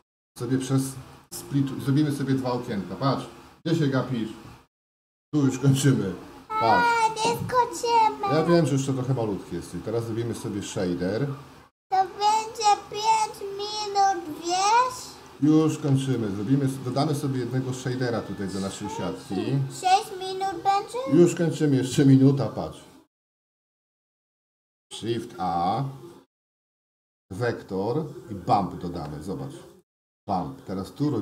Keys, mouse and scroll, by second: 16.2 shift+middle click, 17.5 shift+middle click, 19.4 shift+a, 25.4 KP_0, 26.2 shift+a.